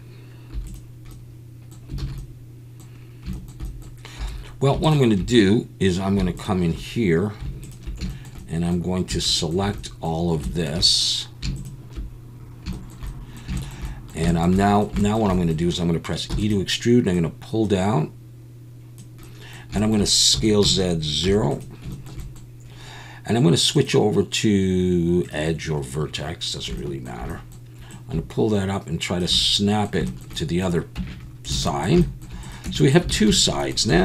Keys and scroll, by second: 0.5 3, 2.0 alt+a, 4.2 2, 16.3 e, 20.3 s, 20.6 z, 21.2 0, 31.0 Tab, 31.5 alt+a, 32.6 Tab, 33.1 alt+a, 33.5 Tab, 33.9 2.